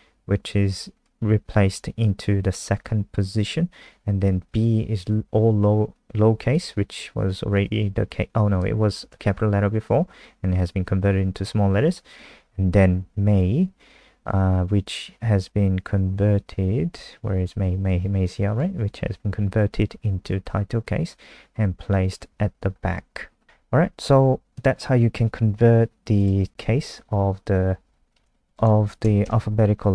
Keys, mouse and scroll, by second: 26.4-27.9 scroll down 2, 26.5 shift+Down, 28.2 shift+End, 28.2 ctrl+c, 28.4 click, 29.2 shift+Home.